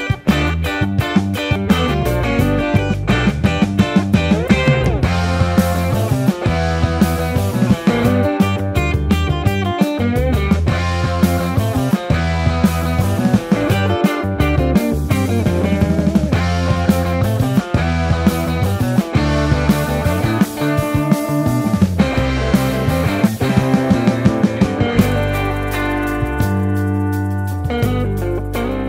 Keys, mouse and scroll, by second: 12.0 Tab.